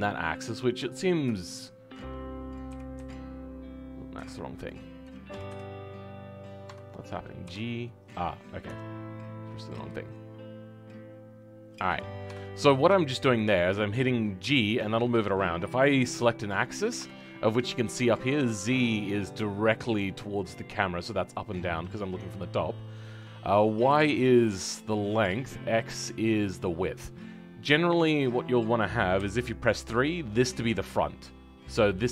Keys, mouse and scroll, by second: 1.7-2.7 scroll up 1, 2.7-4.6 scroll up 1, 4.6-5.3 scroll up 1, 5.3-6.6 scroll up 1, 6.6-7.4 scroll up 1, 7.4-8.4 scroll up 1, 8.4-10.4 scroll up 1, 10.4-11.8 scroll up 1, 11.8-12.4 scroll up 1, 12.4-12.9 scroll up 1, 12.9-14.4 shift+middle drag, 14.4 g, 27.5-29.1 middle drag, 29.1 KP_3.